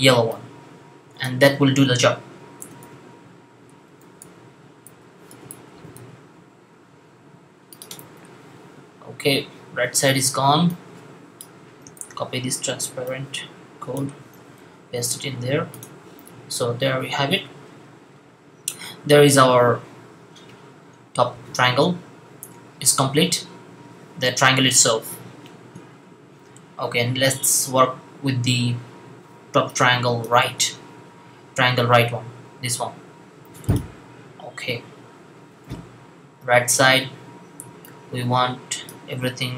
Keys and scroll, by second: 2.4-5.8 typing, 11.8 super+c, 14.4 super+v.